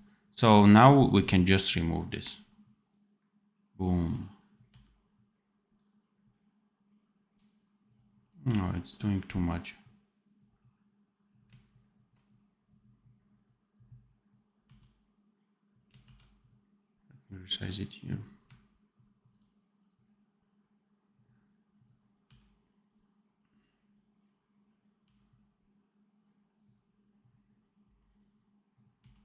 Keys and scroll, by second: 4.6 d, 8.2 d, 14.5 x, 15.9 ctrl+z, 22.1 d, 24.9 d, 27.8 x.